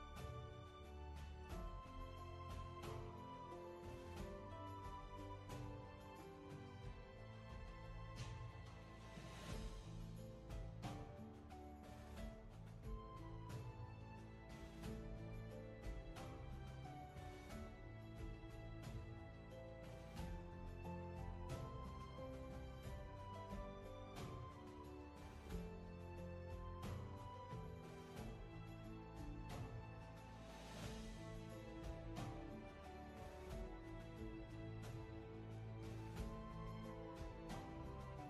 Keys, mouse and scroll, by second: 1.7 scroll down 1, 2.3-4.0 scroll up 1, 4.0 ctrl+z, 9.7 ctrl+z, 15.4 ctrl+z, 24.8 ctrl+z, 36.1 ctrl+z, 36.5-36.9 scroll down 1, 36.9 space, 37.2 scroll down 1, 37.8 space.